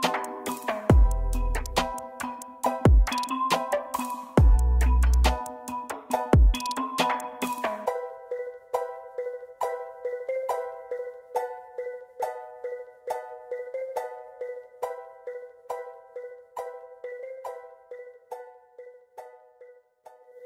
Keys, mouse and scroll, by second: 0.8-1.7 shift+scroll up 1, 4.0 shift+right click, 6.8 typing, 10.1 double click, 11.6 double click, 11.6-13.0 scroll down 1, 13.1 ctrl+z, 13.6 ctrl+z, 14.1 shift+click, 15.8 shift+right click, 17.8-18.1 scroll down 1, 19.2 z, 20.3 z.